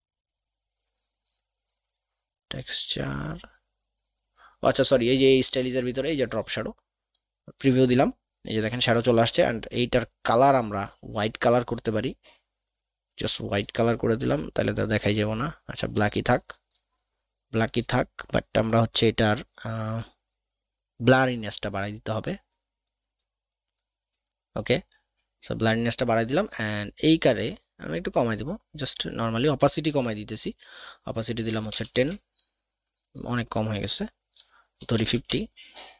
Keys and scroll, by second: 31.5 KP_1, 31.7 KP_0, 31.9 Tab, 34.9 KP_5, 34.9 KP_0, 35.1 Tab.